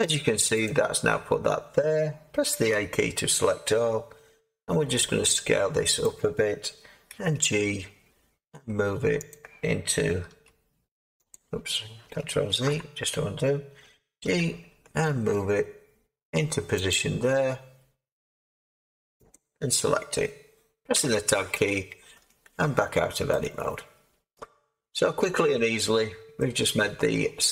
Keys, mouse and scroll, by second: 2.7 a, 4.5 s, 7.1 g, 10.2 s, 12.5 ctrl+z, 14.2 g, 19.3-20.9 drag, 20.9 Tab, 24.2-25.9 middle drag, 25.9-27.2 scroll up 7, 27.2-27.5 scroll up 1.